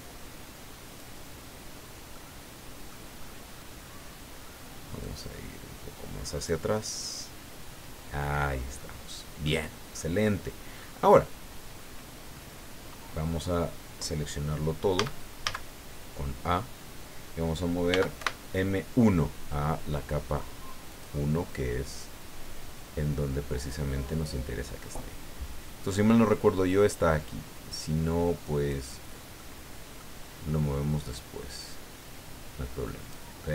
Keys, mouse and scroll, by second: 1.5-1.9 scroll down 1, 2.1-3.1 middle drag, 3.2-3.9 scroll up 2, 5.0-6.7 drag, 6.7-9.0 middle drag, 9.4 click, 10.2 scroll down 1, 10.7-11.0 scroll up 1, 14.6 scroll down 1, 15.0 a, 17.9 m, 18.2 1, 20.9 click, 22.1-22.7 scroll down 4, 23.5-23.9 scroll down 2, 26.0-28.9 drag, 29.4-30.2 middle drag, 31.1-33.3 drag, 33.4-33.5 middle drag.